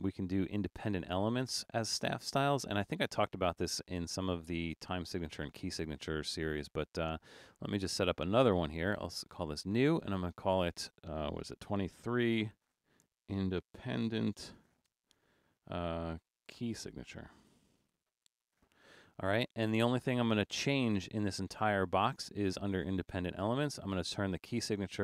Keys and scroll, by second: 11.7-19.1 typing.